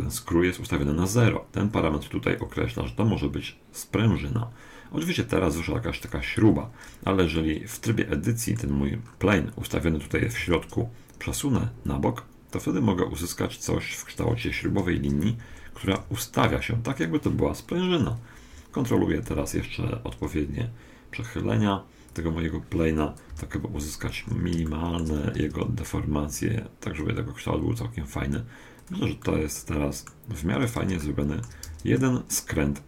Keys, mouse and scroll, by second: 2.4-4.2 drag, 7.7-11.1 middle drag, 10.4 Tab, 11.9-13.8 drag, 14.9 KP_1, 15.9 r, 18.5 KP_3, 20.3 r, 23.3 KP_7, 24.2-26.5 middle drag, 25.4 r, 29.2-32.8 middle drag, 31.7 Tab.